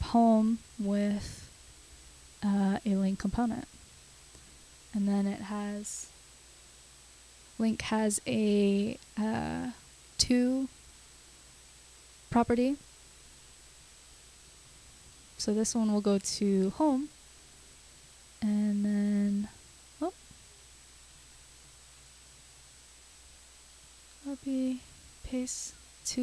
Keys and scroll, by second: 1.3 Return, 2.1-3.4 typing, 4.5 Left, 5.0-6.1 typing, 8.8 =, 9.3 shift+', 11.5 /, 16.2 super+x, 17.2 super+v, 19.8 super+x, 20.9 super+z, 23.8 super+c, 25.7 super+v.